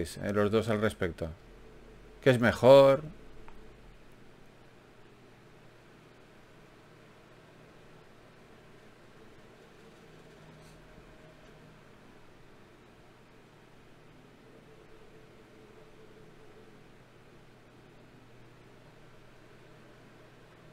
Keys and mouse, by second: 1.7 g, 2.7 g, 3.3-5.8 drag, 5.8 shift+q, 10.5 KP_1, 19.7-20.7 drag, 19.7 d.